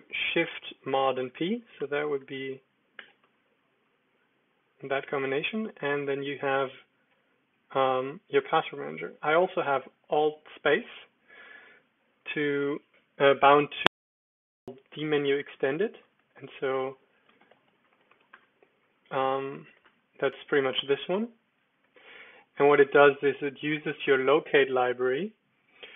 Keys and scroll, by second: 0.0-0.2 typing, 2.9 super+p, 10.7 alt+space, 13.5 Escape, 14.3-18.6 typing, 16.1 super+Return, 19.6 typing, 19.8 Tab, 20.7 Return, 21.9 Escape, 23.5-24.8 typing.